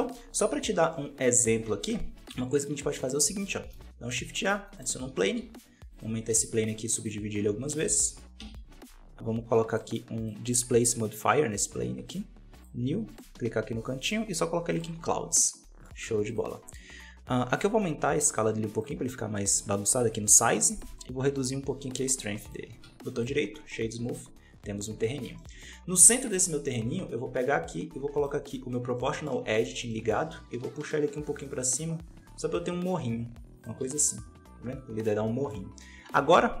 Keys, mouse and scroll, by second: 0.0 click, 0.5 scroll down 3, 0.8 middle click, 1.6 x, 2.9 right click, 3.1 x, 3.6 shift+a, 4.9 scroll down 1, 5.0 Tab, 5.2 s, 6.2 w, 7.6 shift+r, 7.7 shift+r, 8.3 Tab, 11.5-15.3 drag, 15.3 middle click, 15.9 z, 16.5-17.5 middle drag, 17.5-23.1 drag, 23.1 w, 23.4 scroll down 2, 23.6-25.1 middle drag, 25.1 Tab, 25.3 middle click, 25.5 scroll up 2, 26.6 right click, 26.9 scroll down 2, 28.1 click, 28.9-30.1 middle drag, 30.1 g, 33.7 Tab, 33.9-36.6 middle drag.